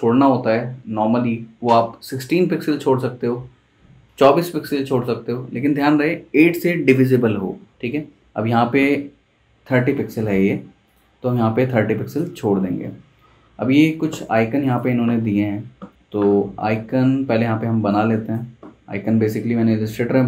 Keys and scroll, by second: 17.2 z, 18.6 v.